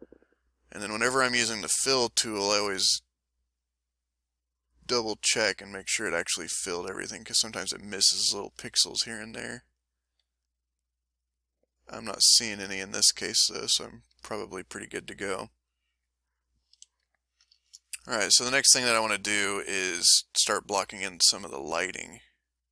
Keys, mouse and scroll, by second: 7.8-9.1 middle drag, 9.4 ctrl+click, 11.9 ctrl+click, 14.6 ctrl+middle click, 15.1 ctrl+middle click, 16.7 ctrl+a, 16.9 ctrl+middle click, 17.6 ctrl+shift+middle click, 20.6 middle click, 21.4 shift+click, 21.9 shift+click, 22.3 shift+click.